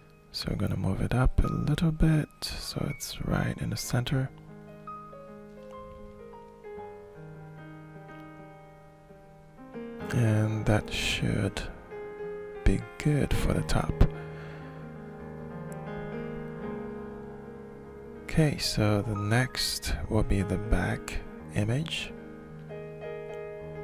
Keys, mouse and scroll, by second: 0.0-2.7 drag, 3.6 middle click, 4.4 middle click, 5.4-11.1 alt+shift+middle drag, 11.8 shift+click, 12.1 shift+click, 13.2 scroll up 2, 13.6-15.5 alt+shift+drag, 16.0-21.4 alt+shift+drag, 22.7 click.